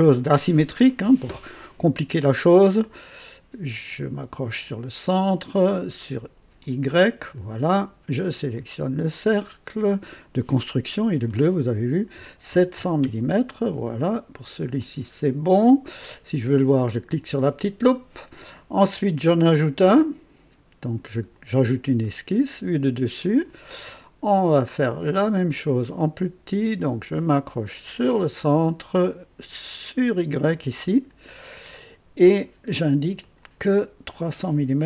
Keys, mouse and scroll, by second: 3.8 click, 6.6 click, 7.4 right click, 8.3 click, 9.6 click, 12.1 KP_7, 12.5 KP_0, 13.0 Return, 14.8 click, 16.8 click, 21.3 click, 22.5 click, 23.2 click, 25.5 click, 28.0 click, 30.9 click, 32.3 right click, 33.2 click, 34.1 click.